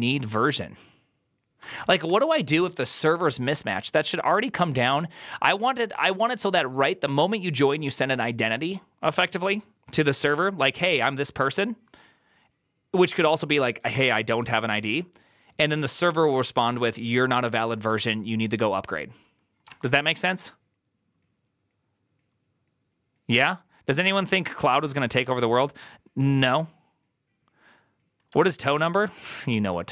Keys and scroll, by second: 1.5-2.3 typing, 19.6 alt++, 29.4 alt+{, 29.4 alt++.